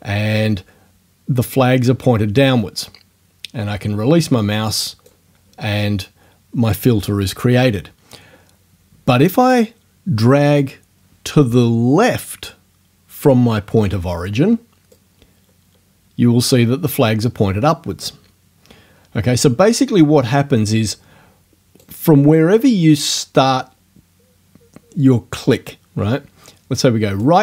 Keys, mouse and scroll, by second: 14.9-22.0 right drag, 27.2-27.4 right drag.